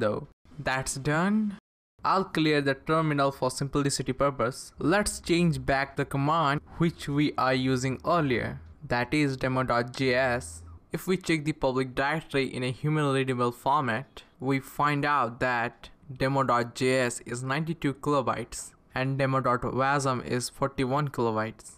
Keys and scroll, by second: 2.3-4.2 typing, 6.5 Page_Up, 6.7 Page_Up, 7.4 Page_Up, 7.9 Page_Up, 8.5 Page_Up, 10.1 Return, 10.8-14.8 typing, 15.1 Return.